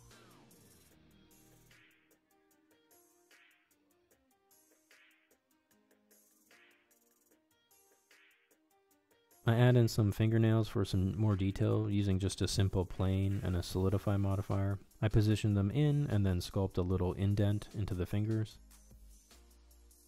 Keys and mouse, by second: 0.3 shift+middle click, 0.4 ctrl+Tab, 0.6 click, 0.9 click, 1.0 middle click, 1.3 click, 1.5 click, 3.1 ctrl+Tab, 3.5 ctrl+Tab, 3.8 middle click, 4.1 middle click, 4.3 middle click, 4.5 ctrl+Tab, 4.7 shift+middle click, 5.1 shift+click, 5.4 middle click, 5.5 shift+click, 7.4 middle click, 7.7 middle click, 7.9 shift+click, 8.9 ctrl+Tab, 9.3 middle click, 9.7 middle click, 10.1 middle click, 10.5 Tab, 11.5 s, 11.7 g, 12.0 middle click, 12.2 g, 12.5 KP_1, 13.2 shift+middle click, 13.4 right click, 13.7 right click, 14.1 ctrl+z, 14.2 click, 14.4 shift+click, 14.5 s, 15.3 click, 15.6 s, 16.5 Tab, 16.9 click, 17.1 q, 17.3 q, 18.4 Tab, 18.8 click, 19.5-20.0 typing.